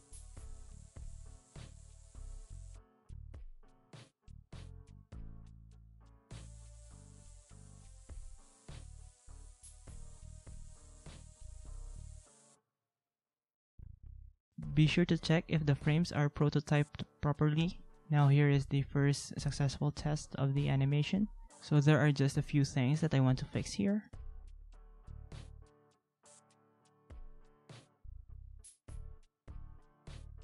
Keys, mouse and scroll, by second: 11.9 ctrl+a, 12.9 ctrl+=, 13.4 ctrl+-, 13.5 ctrl+-.